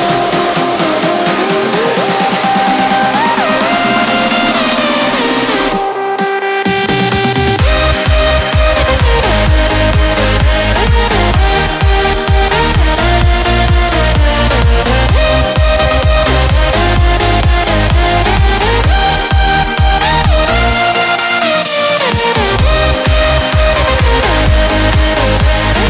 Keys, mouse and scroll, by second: 0.6-3.3 drag, 3.3-6.1 drag, 6.5 click, 13.6 click, 16.6 click, 19.3 space, 19.6 click, 19.8 space, 20.2 space, 21.4 v, 21.8-24.6 drag.